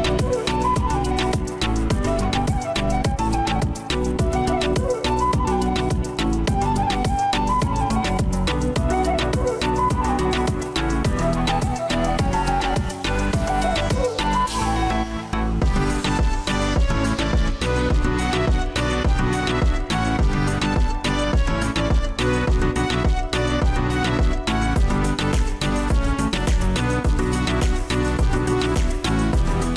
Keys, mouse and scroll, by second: 2.4 right click, 8.0 ctrl+t, 9.6 ctrl+z, 20.8 ctrl+t, 27.9 ctrl+t.